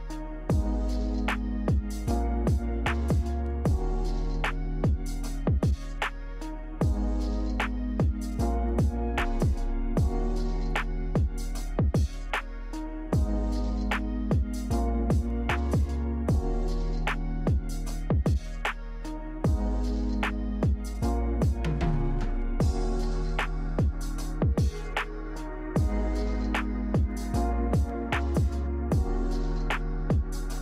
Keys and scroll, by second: 7.9 a, 14.4 g, 20.1 z, 25.9 ctrl+z, 26.1 ctrl+z, 26.7 ctrl+z, 30.0 z.